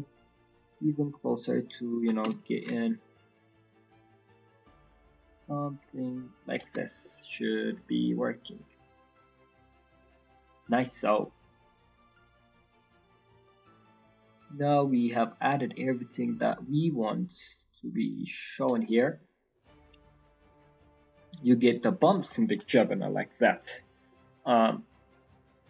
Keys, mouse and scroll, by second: 2.9 shift+click, 6.8-8.4 scroll down 8, 7.1 middle click, 8.0 middle click, 8.5-9.2 scroll up 5, 9.2 middle click, 9.8 scroll down 2, 10.0 middle click, 10.2 scroll up 2, 11.1 click, 14.0 click, 18.8-19.2 scroll down 3, 19.0 middle click, 19.2-19.5 scroll up 3, 19.5 middle click, 20.2-20.9 scroll down 2, 20.5 middle click, 20.9 middle click, 21.4 middle click, 21.7-22.1 scroll up 2, 22.1 middle click, 22.6-23.1 scroll down 2, 22.8 middle click, 23.2-23.5 scroll up 4, 23.5 middle click, 24.1 middle click, 25.2 click.